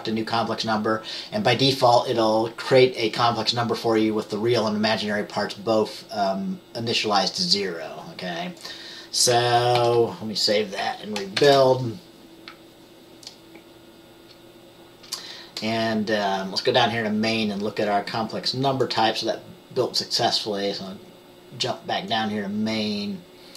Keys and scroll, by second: 9.9 ctrl+s, 11.5 ctrl+b.